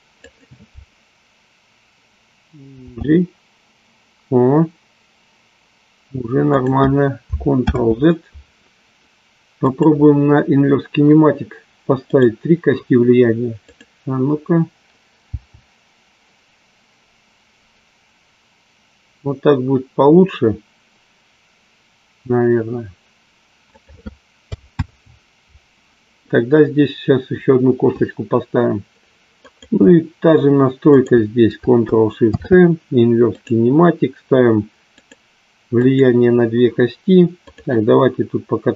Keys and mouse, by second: 0.4-1.3 drag, 2.8 g, 6.4 click, 7.8 ctrl+z, 9.6-10.6 drag, 13.7-14.7 drag, 15.2 g, 24.8 ctrl+z, 29.4-30.4 drag, 30.9 shift+click, 35.7 click.